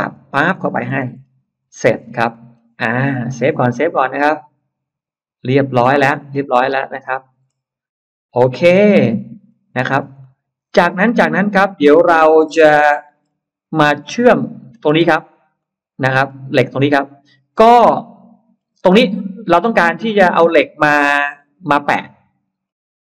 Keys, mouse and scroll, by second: 0.0 click, 0.5-2.0 scroll down 5, 0.7 space, 1.4 Escape, 1.4 space, 2.2 middle click, 2.4 scroll down 2, 2.7-3.0 scroll up 2, 3.0 middle click, 4.1 click, 7.2 middle click, 7.2-7.6 scroll up 1, 7.8 middle click, 7.8 scroll down 1, 8.0 scroll up 1, 8.3 middle click, 9.3-10.1 scroll up 2, 10.0-13.0 middle drag, 13.1-13.4 scroll down 1, 13.7-14.4 scroll up 2, 15.3 scroll up 2, 15.4 middle click, 16.1-16.4 scroll down 2, 18.0-18.3 scroll down 2, 18.5 scroll down 2, 18.8-19.5 scroll up 4, 19.4-20.8 middle drag, 21.0 scroll down 1, 21.8 scroll up 1, 22.5-23.1 scroll up 1.